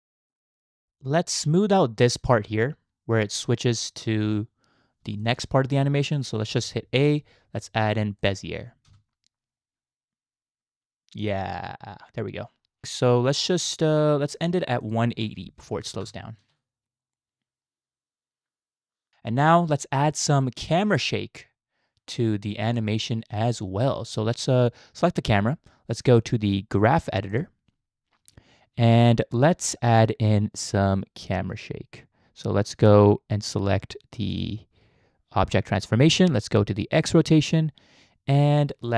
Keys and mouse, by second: 0.8 space, 1.0-2.2 drag, 2.4 space, 5.0 space, 5.2-6.1 drag, 6.5 a, 7.0-8.9 drag, 8.9 space, 12.8-14.0 drag, 14.8-16.1 drag, 16.5 space, 19.1 click, 22.6 click, 26.1-27.5 drag, 34.3 click, 37.0 click.